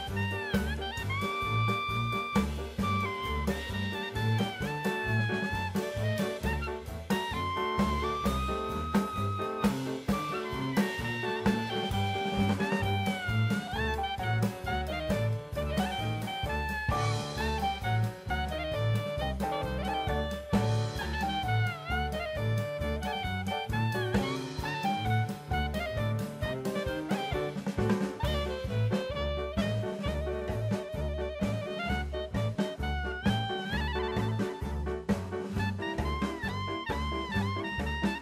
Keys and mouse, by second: 1.1 click, 1.4 middle click, 2.5 shift+middle click, 3.2 ctrl+r, 4.8 click, 5.4 ctrl+r, 6.7 click, 6.9 middle click, 7.9 ctrl+r, 10.1 click, 12.2 click, 12.8 middle click, 13.1 Tab, 13.8 KP_1, 14.8 click, 15.8 shift+middle click, 16.5-17.7 drag, 18.4 shift+middle drag, 22.6-23.2 drag, 24.2 m, 33.0 click.